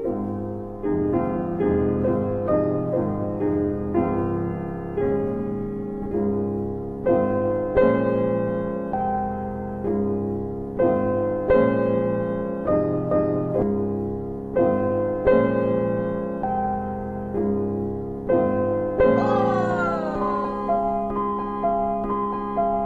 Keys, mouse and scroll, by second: 0.1-1.5 scroll up 1, 1.9 click, 3.9-5.8 typing, 6.8 Tab, 7.5-8.5 typing, 8.8 Return, 11.0 click, 11.9 alt+middle click, 13.2 alt+middle click, 13.7 middle click, 14.2 scroll up 1, 15.0 alt+middle click, 15.4-15.9 scroll up 1, 17.8 click, 18.2 click, 19.3 double click, 19.7 ctrl+click.